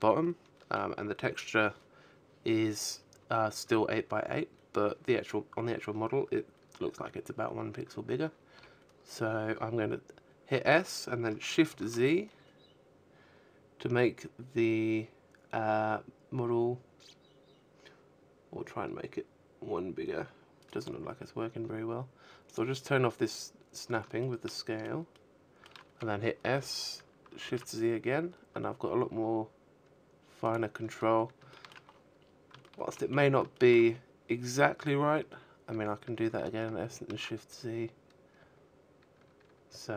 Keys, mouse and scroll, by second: 5.8 s, 18.0 right click, 19.8 click, 20.6-21.6 scroll up 3, 21.5 shift+middle click, 22.2 shift+middle click, 23.7 s, 27.8 click, 28.8 shift+middle click, 29.2-29.9 scroll up 8, 29.9 shift+middle click, 30.4-31.4 scroll up 3, 31.1 shift+middle click, 33.4 s, 38.0 click, 38.0-38.9 scroll down 4, 38.9 shift+middle click, 38.9-39.9 scroll down 11, 39.9 shift+middle click.